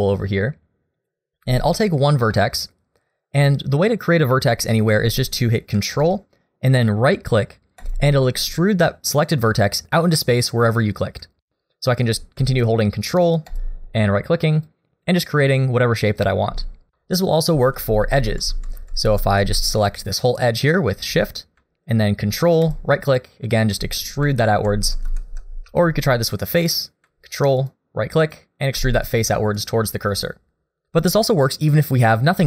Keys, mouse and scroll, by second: 1.0 click, 1.6 shift+middle click, 2.0 scroll up 1, 2.3 middle click, 7.8 ctrl+right click, 10.5 middle click, 11.5 shift+middle click, 13.5 ctrl+right click, 14.6 ctrl+right click, 15.0 ctrl+right click, 15.5 ctrl+right click, 15.9 ctrl+right click, 16.3 ctrl+right click, 17.4 ctrl+z, 17.8 ctrl+z, 18.0 ctrl+z, 18.3 ctrl+z, 18.5 ctrl+z, 18.8 ctrl+z, 19.0 ctrl+z, 20.3 shift+click, 22.6 ctrl+right click, 23.1 ctrl+right click, 23.5 ctrl+right click, 24.5 ctrl+z, 24.8 ctrl+z, 25.7 3, 26.6 click, 27.6 ctrl+right click, 28.2 ctrl+right click, 29.0 ctrl+right click, 29.5 ctrl+right click, 30.8 ctrl+z, 31.1 ctrl+z, 31.9 ctrl+z.